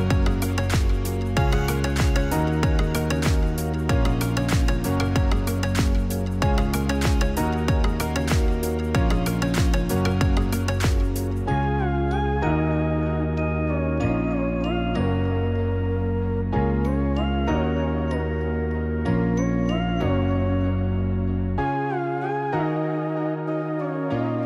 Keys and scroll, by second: 1.4-2.3 typing, 3.3 typing, 10.0 ctrl+c, 11.3-12.2 typing, 13.5 ctrl+v, 14.4-15.5 typing, 18.8 F9.